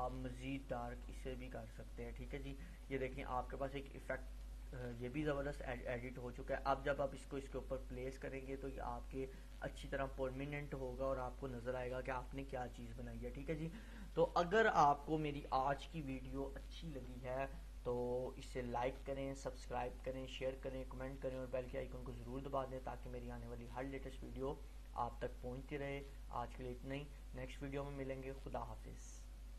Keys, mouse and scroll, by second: 13.2-13.5 click.